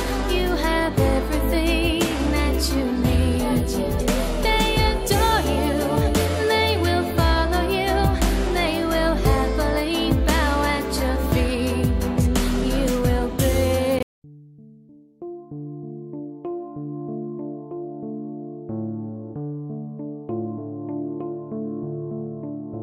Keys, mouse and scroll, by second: 4.0 scroll up 1, 12.0 Page_Down.